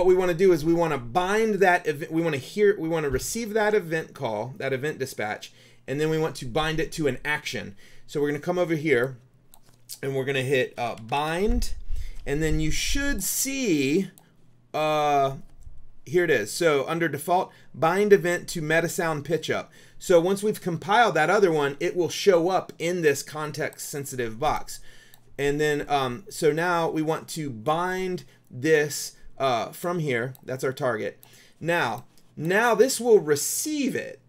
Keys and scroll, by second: 10.6-12.0 typing.